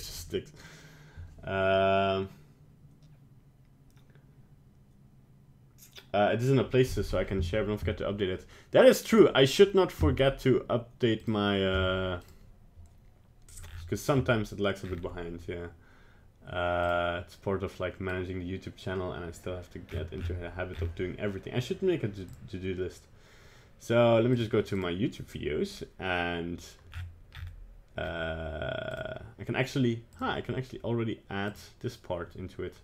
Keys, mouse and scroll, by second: 0.1 middle click.